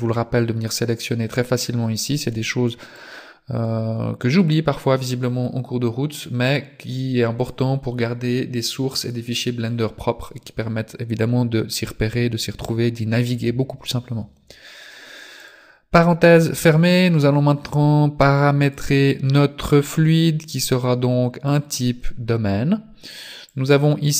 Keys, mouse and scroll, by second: 3.0 click, 6.5 click, 15.4 click, 18.2 click, 20.0 click, 23.5 click.